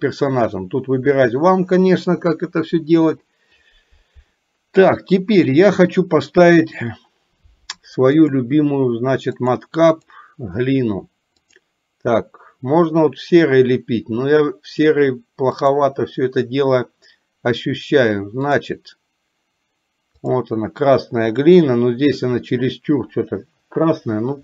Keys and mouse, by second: 1.3 click, 8.1-12.6 drag, 15.5-20.9 drag.